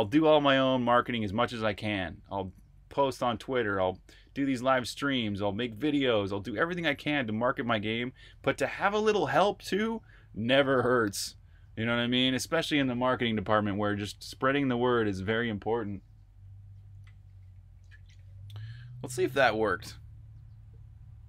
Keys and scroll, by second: 19.1 super+r, 19.5-20.2 typing.